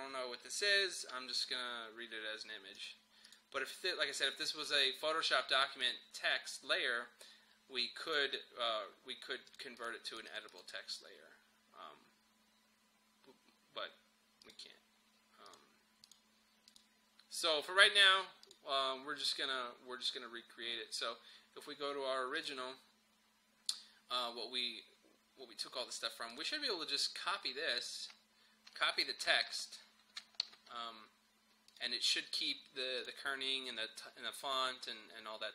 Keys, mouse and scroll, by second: 2.8 click, 5.8 click, 8.1 right click, 9.5 click, 14.5 click, 22.4 click, 26.3 click, 29.3 ctrl+a, 30.5 ctrl+c, 31.7 click.